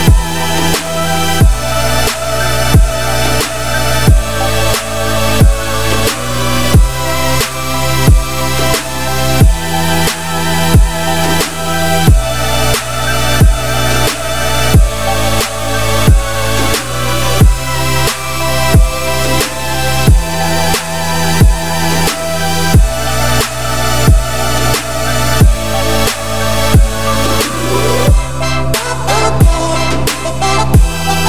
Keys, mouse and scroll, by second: 0.3-10.3 drag, 10.3-10.6 middle drag, 10.6 scroll up 1, 10.9-13.7 shift+middle drag, 13.7 click, 16.8-17.9 middle drag, 17.9 `, 18.6 shift+middle drag, 18.9-19.6 scroll up 2, 19.6-20.2 shift+middle drag, 20.2-20.9 scroll up 1, 20.9-22.2 scroll down 3, 22.2 shift+middle click, 22.6-23.5 scroll up 8, 23.5-24.1 shift+middle drag, 24.1 click, 24.9-26.1 drag, 26.1-26.5 scroll up 1, 26.5 shift+middle drag, 26.7 scroll up 1, 27.2 click, 27.7-28.5 scroll down 4, 28.6-31.2 drag.